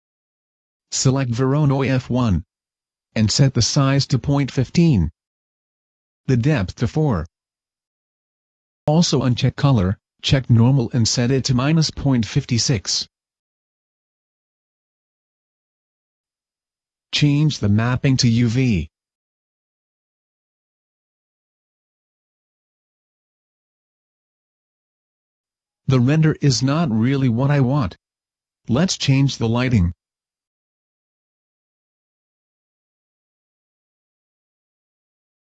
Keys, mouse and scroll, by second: 32.4 click, 33.3 right click, 33.8 middle click, 34.2 middle click, 34.7 scroll down 1.